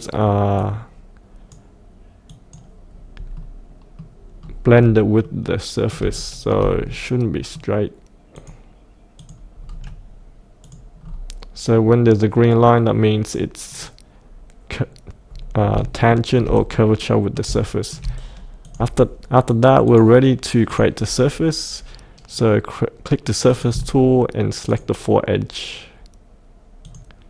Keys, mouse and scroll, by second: 2.9-3.3 scroll up 1, 3.3 middle click, 4.4 scroll down 1, 4.7-5.3 scroll up 1, 5.3 middle click, 5.9 scroll down 1, 6.2 shift+middle click, 6.9 middle click, 7.1-8.1 middle drag, 8.3 click, 9.6 scroll down 1, 10.6 click, 10.9 scroll down 1, 13.7 click, 15.2 scroll up 1, 16.1 shift+middle click, 16.7 middle click, 17.2 middle click, 17.6 shift+middle click, 18.6 click, 24.6 ctrl+click, 26.8 ctrl+click.